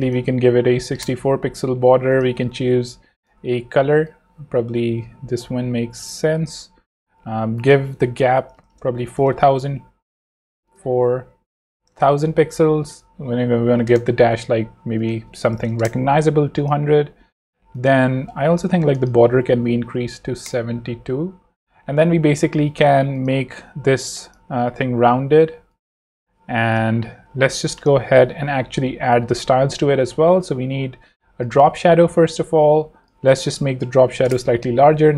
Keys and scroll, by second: 0.4-1.3 typing, 8.2-9.0 typing, 9.2 Return, 11.3 Right, 11.7 0, 11.9 Return, 13.4-16.3 typing, 19.7 7, 20.2 2, 20.4 Return, 24.1 z, 24.9 v, 33.9 9, 34.2 Return.